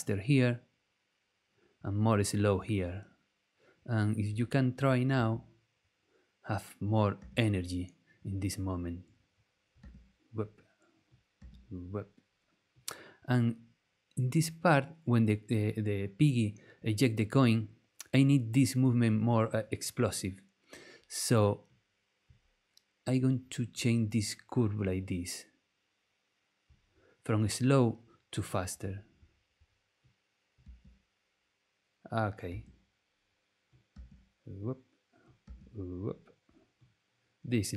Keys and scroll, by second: 5.1 space, 7.2 space, 9.8 space, 11.4 space, 30.6 space, 32.5 space, 33.9 space, 35.4 space.